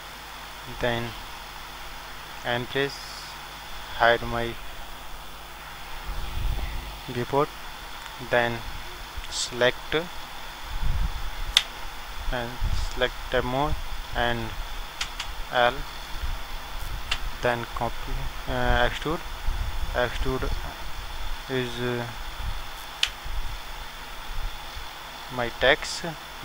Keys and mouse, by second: 2.6 middle click, 2.6 n, 9.0-14.1 middle drag, 14.1-15.7 drag, 15.4 a, 19.4-21.0 drag.